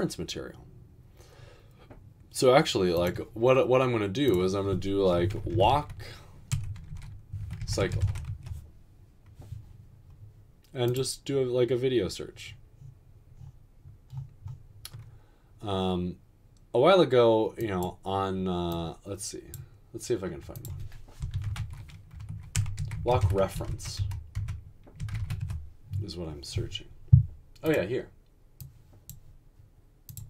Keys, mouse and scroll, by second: 5.4-8.2 typing, 21.2-25.7 typing.